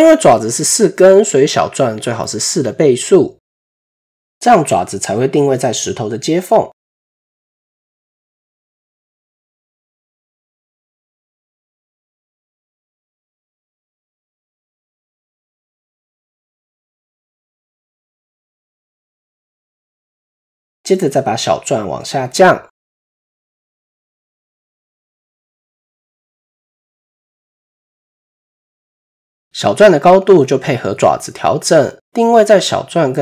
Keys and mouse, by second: 7.5 click, 9.4-11.8 drag, 12.3-16.0 middle drag, 16.6-17.6 middle drag, 18.4 KP_1, 21.1 click, 21.1 KP_3, 22.3 shift+middle click, 23.3-23.9 drag, 24.1-24.8 middle drag, 25.4 shift+middle drag, 26.0-26.5 middle drag, 26.9-27.3 shift+middle drag, 27.4-28.3 middle drag, 32.8-33.2 drag.